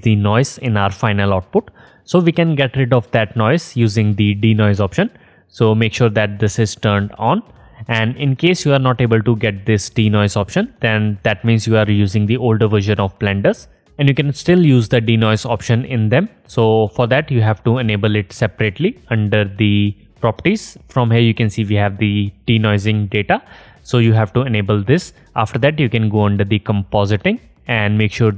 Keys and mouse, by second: 6.7 click, 8.0-15.2 drag, 19.6 click, 19.6 middle click, 19.6 right click, 26.1-28.3 drag, 26.1 middle click, 26.1 right click.